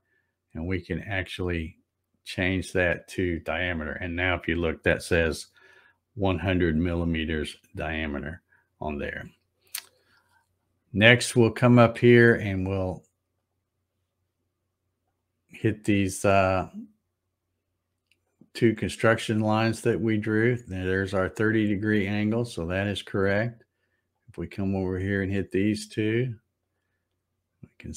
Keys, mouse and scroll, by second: 2.2 click, 13.3 click, 15.0 click, 18.2 click, 20.8 click, 24.1 click, 26.6 click.